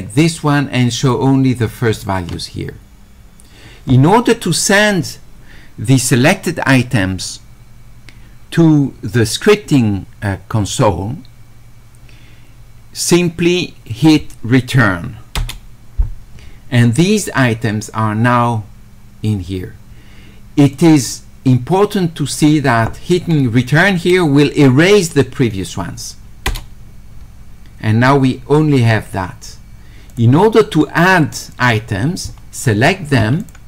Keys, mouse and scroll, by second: 0.2 ctrl+click, 1.0 ctrl+click, 20.8 click, 22.4 click, 30.1 click, 31.6 click, 33.4 ctrl+click.